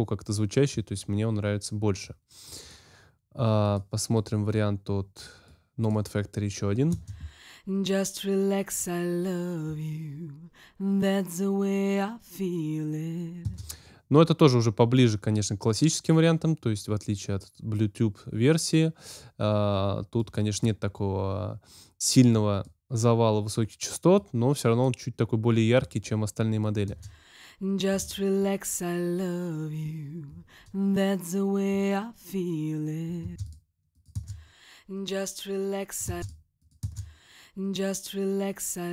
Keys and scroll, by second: 6.8 space, 13.4 space, 26.8 space, 33.2 space, 36.0 space.